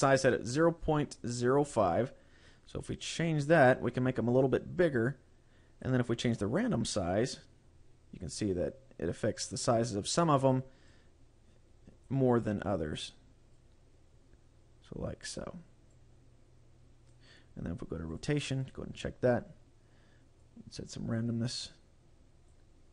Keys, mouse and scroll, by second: 2.5 click, 6.8 click, 11.0 click, 12.4-13.0 scroll up 3, 13.6 click, 16.0 click, 18.2 click, 18.7 click, 20.5 click, 21.7 click.